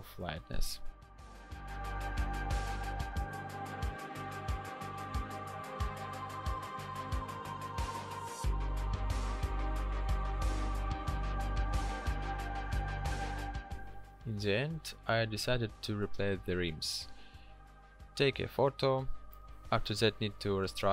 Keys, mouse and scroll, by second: 19.4 w.